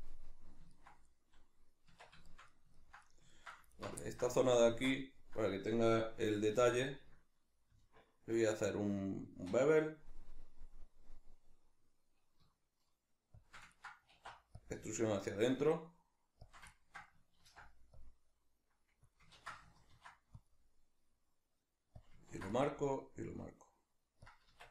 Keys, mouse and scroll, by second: 1.9 Tab, 2.3 shift+middle click, 3.7 alt+right click, 4.0-13.5 ctrl+middle drag, 6.5 ctrl+b, 13.5 shift+click, 13.7-16.5 ctrl+middle drag, 14.1 alt+e, 16.5 shift+click, 17.4 ctrl+r, 19.1 click, 19.3 ctrl+z, 22.1 click, 22.3 ctrl+r, 24.3 click, 24.5 Tab.